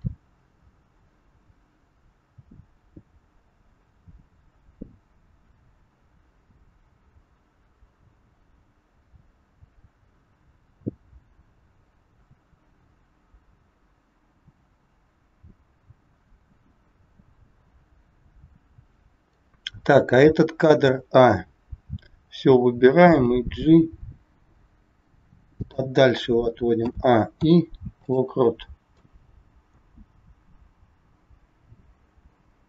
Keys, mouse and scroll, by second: 18.8 KP_3, 20.8 a, 23.2 g, 27.3 i, 28.9 click.